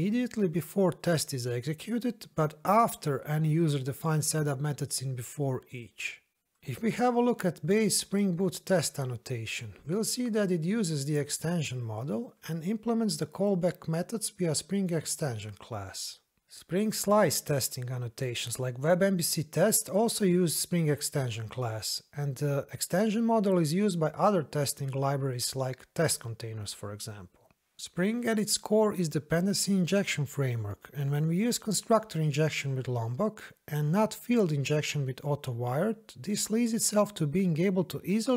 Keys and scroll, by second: 9.2 ctrl+b, 14.9 ctrl+b.